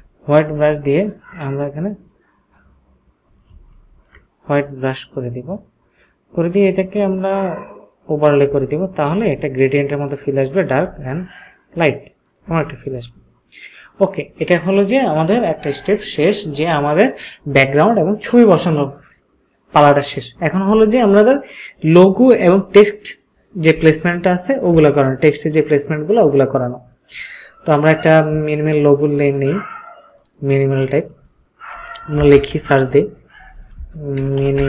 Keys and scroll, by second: 3.5 ctrl+z, 8.5 ctrl+space, 9.0 ctrl+space, 33.4-34.6 typing.